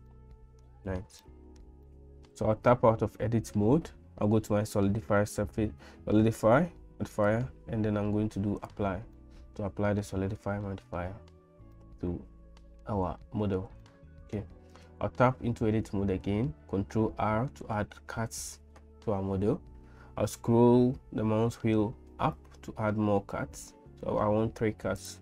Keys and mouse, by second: 0.1 middle click, 1.2-2.7 shift+middle drag, 2.7 Tab, 7.2-8.7 drag, 9.2 middle click, 10.6 shift+middle click, 11.8-13.1 middle drag, 13.2 shift+middle click, 13.9 middle click, 15.0 Tab, 17.0 ctrl+r.